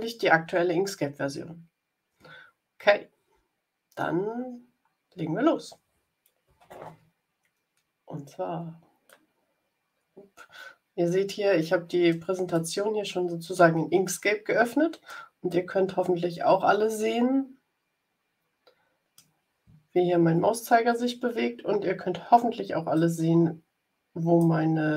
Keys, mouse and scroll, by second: 7.6 scroll down 2, 9.0-12.3 middle drag, 12.5-13.8 middle drag, 14.0-16.1 middle drag, 16.1 click, 16.2 middle click, 16.3 click, 16.5-19.4 drag, 23.0-24.5 drag.